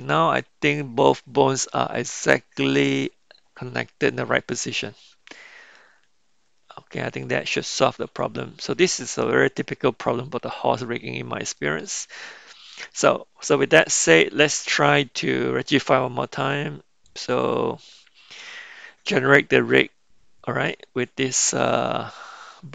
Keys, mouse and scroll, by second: 8.1 Tab, 17.1 click.